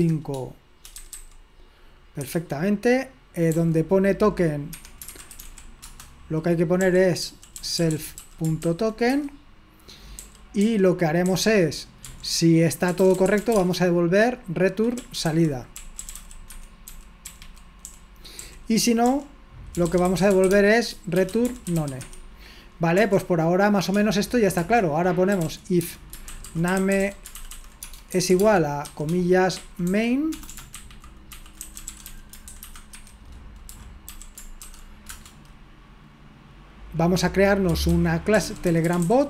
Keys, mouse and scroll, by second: 0.0 typing, 1.2 typing, 2.2 Escape, 3.5 f, 4.7 Escape, 4.8-8.7 typing, 9.2 Escape, 10.2 typing, 12.1-23.9 typing, 24.6 Return, 25.3-35.1 typing, 35.4 Return, 38.1-39.2 typing.